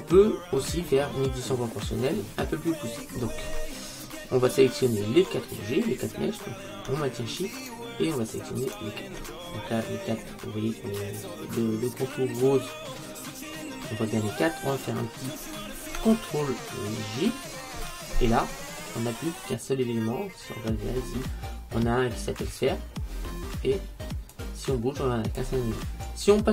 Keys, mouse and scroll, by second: 1.3-3.2 scroll up 1, 3.2-6.8 scroll down 1, 7.7-10.9 right drag, 9.6-12.1 middle drag, 17.4 ctrl+j, 24.4 click.